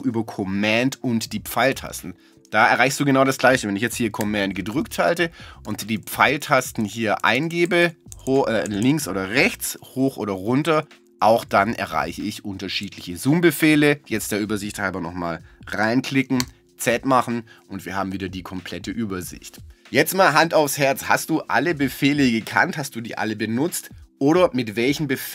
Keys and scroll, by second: 4.7 super+Right, 7.2 super+Left, 9.9 super+Up, 10.4 super+Down, 16.4 z.